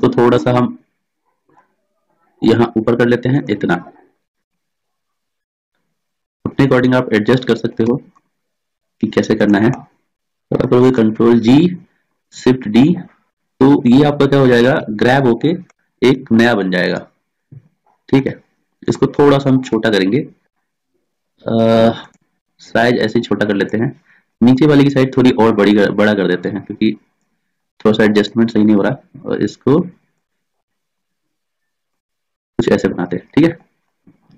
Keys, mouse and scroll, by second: 1.6-3.0 drag, 4.3 s, 7.9 s, 11.1 ctrl+g, 12.3 shift+d, 15.8-19.7 drag, 19.8 s, 22.6 s, 24.5 click, 25.4 s, 25.8-27.8 drag, 28.3 right click, 28.9 click, 28.9 s, 30.7-32.1 right drag, 31.1 s, 32.6 click, 32.7 right click, 33.5-34.3 drag.